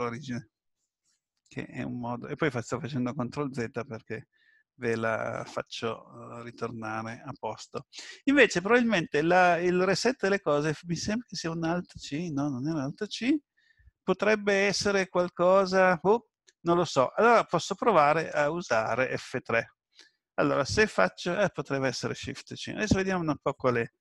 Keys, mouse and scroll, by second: 5.3 ctrl+z, 11.5 alt+c.